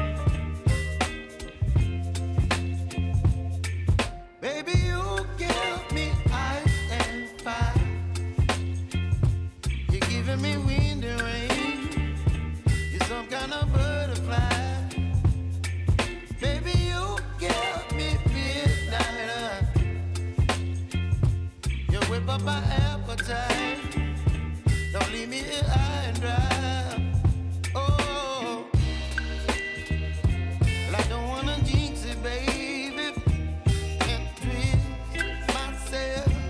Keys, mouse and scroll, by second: 0.4 space, 2.5 ctrl+click, 5.9 scroll down 1, 6.7-8.6 ctrl+drag, 8.9 space, 10.4-12.8 drag, 12.8 space, 14.3-15.7 drag, 16.2 ctrl+a, 16.5 click, 17.6 space, 19.8 space, 20.4 click, 20.8 space, 22.0-26.1 drag, 26.9 scroll up 1, 27.5-28.0 typing, 29.7-30.4 typing, 30.9-33.0 drag, 33.0 space, 36.2-36.4 typing.